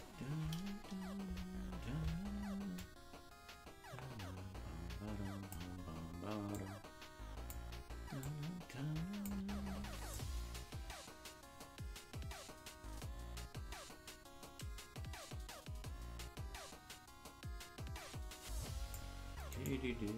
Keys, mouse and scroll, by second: 0.7 KP_0, 2.8-5.6 drag, 6.4-7.5 drag, 8.1-9.3 drag, 10.1-19.0 drag, 19.5 right click.